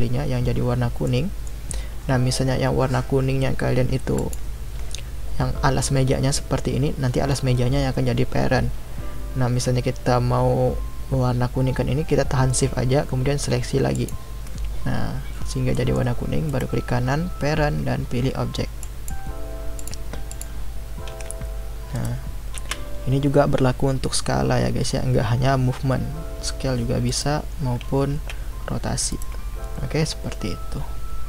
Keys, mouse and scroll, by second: 4.2 shift+click, 13.9 shift+click, 15.7 middle click, 16.5-19.5 right drag, 19.8 click, 20.3 click, 21.1 g, 22.6 s, 28.1 r.